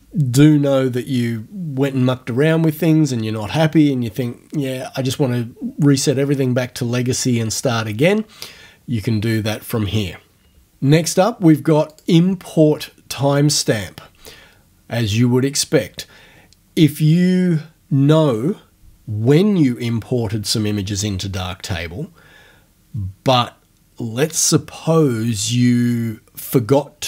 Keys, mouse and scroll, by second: 12.0 click, 12.7-13.2 scroll down 2.